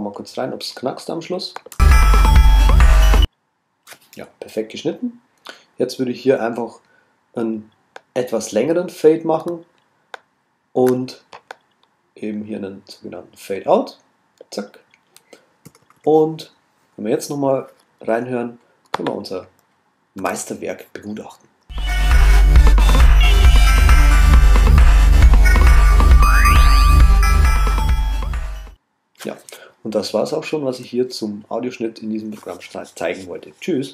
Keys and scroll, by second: 20.2 super+a.